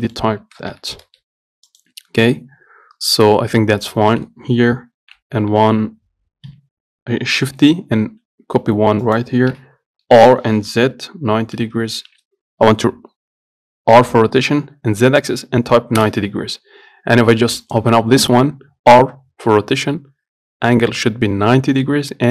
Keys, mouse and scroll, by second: 0.0 scroll up 1, 0.3 shift+middle click, 1.0 g, 2.5-3.0 scroll down 1, 3.0-3.9 scroll up 1, 3.9 scroll down 1, 4.2-5.3 shift+middle drag, 5.3 shift+d, 9.8 r, 17.9-20.6 drag.